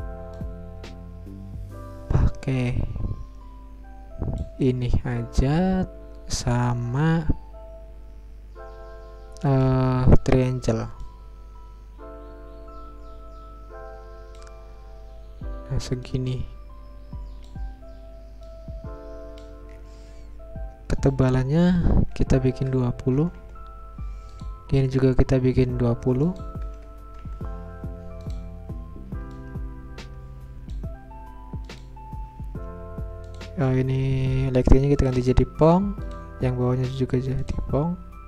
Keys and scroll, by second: 22.2-23.0 typing, 25.5 Return, 26.3-27.2 typing, 29.2 Return.